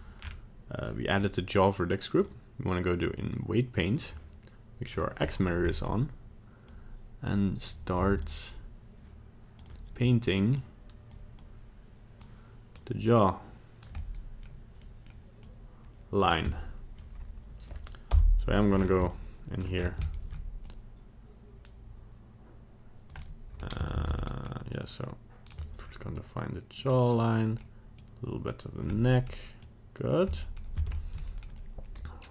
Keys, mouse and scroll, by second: 0.2-0.7 scroll down 4, 2.2 click, 4.9 click, 5.2 middle click, 5.6 scroll up 1, 6.6 click, 8.0 f, 9.5 click, 10.5 click, 11.3 click, 12.9 click, 14.0 middle click, 14.9 middle click, 15.4 click, 16.2-16.5 scroll down 3, 16.5 middle click, 18.1 KP_Divide, 18.7 scroll up 6, 19.1 shift+middle click, 19.7 scroll up 2, 20.0 shift+middle click, 20.6 click, 23.3 middle click, 24.0 ctrl+z, 24.2 middle click, 24.7 click, 25.6 middle click, 26.2 click, 26.9 middle click, 27.4 middle click, 28.0 click, 28.9 middle click, 29.6 click, 30.4 middle click, 31.1 shift+middle click, 31.3 middle click, 31.5 click, 31.5 shift+middle click.